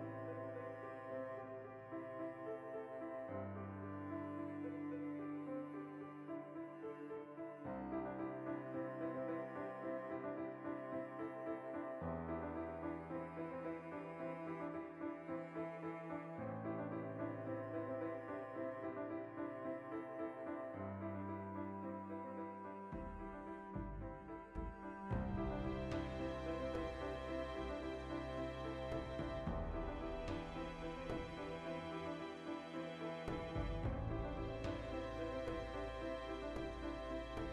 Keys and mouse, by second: 0.2 shift+click, 0.4-2.4 ctrl+middle drag, 1.1 alt+q, 2.0 g, 2.4 click, 2.5 s, 2.8 click, 3.1 ctrl+a, 4.3-9.2 middle drag, 9.2 alt+q, 9.7 alt+o, 10.0 shift+middle click, 10.4 g, 10.6 shift+click, 10.6 shift+middle click, 10.8 g, 11.1 click, 11.3 s, 11.7 click, 12.0 alt+q, 12.6-13.6 ctrl+shift+middle drag, 13.1 g, 13.6 click, 14.2 ctrl+middle click, 14.8 alt+q, 15.2 ctrl+middle click, 15.6 g, 16.2 click, 16.8-23.5 middle drag, 17.2 alt+q, 19.4 g, 20.3 click, 20.9 shift+s, 21.7 shift+a, 23.0 Tab, 23.5 click, 23.8 a, 24.3 v, 24.7-27.4 middle drag, 25.0 g, 25.7 Return, 26.1 o, 28.0 right click, 28.2 shift+middle click, 28.9 shift+s, 29.4 shift+middle click, 29.7 ., 30.1 shift+middle click, 30.4 a, 30.5 r, 31.5-35.0 middle drag, 32.0 Escape, 32.8 r, 34.7 Tab, 35.0 right click, 35.5-37.4 drag.